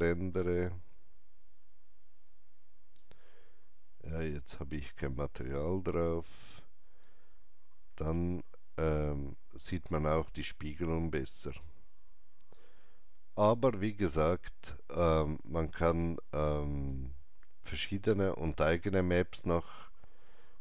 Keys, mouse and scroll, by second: 8.9 alt+right click, 16.7-18.6 drag, 16.7 alt+right click, 18.6 click.